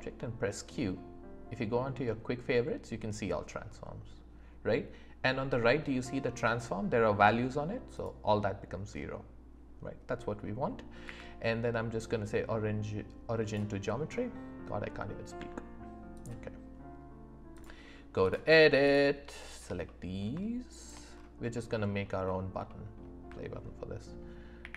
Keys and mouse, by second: 11.0 q, 14.1-14.9 middle drag, 15.3 Tab, 17.6 click, 19.5 shift+click, 19.8 middle click, 20.8 shift+click, 21.5 middle click, 22.6 middle click, 24.6 ctrl+b.